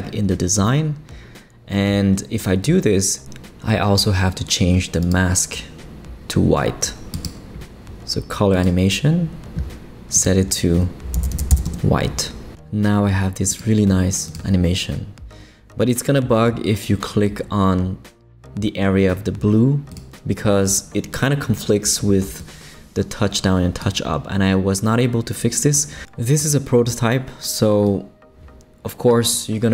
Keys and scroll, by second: 0.6 Return, 3.9 typing, 11.1 f, 11.6 Return.